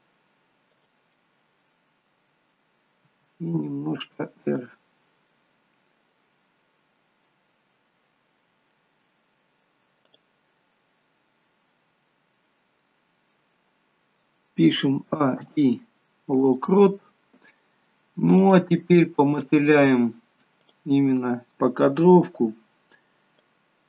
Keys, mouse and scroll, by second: 1.0 middle click, 3.1 r, 5.3 middle click, 6.9-7.7 scroll down 1, 7.7 middle click, 7.7-8.1 scroll down 1, 10.1 click, 10.5 middle click, 14.9 a, 15.3 i, 17.2-17.8 scroll down 3, 18.4 click, 19.2 click, 20.6 click, 21.1 scroll down 1, 21.2 middle click, 22.0-23.1 scroll down 2, 23.6 click.